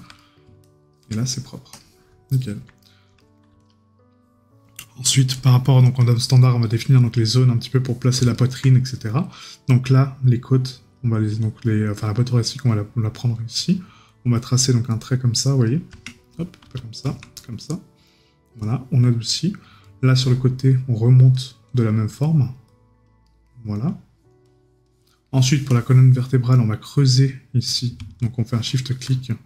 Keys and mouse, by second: 0.2 right click, 8.3 right click, 19.3 right click, 23.3 right click, 25.1 right click.